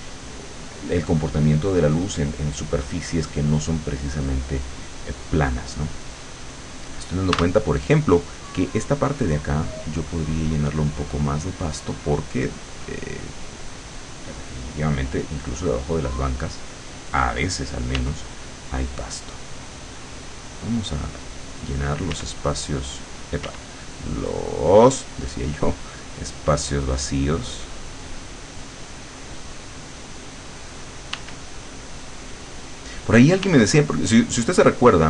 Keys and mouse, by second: 7.4 w, 9.7-11.3 drag, 11.5-13.1 drag, 13.3 click, 14.7 click, 15.5 click, 18.0 w, 18.6-21.9 drag, 22.2 w, 23.5 w, 24.6-27.1 drag, 27.3-28.9 drag, 29.1 click, 31.2 w, 31.7-33.5 drag, 33.5 w, 34.3-35.0 drag.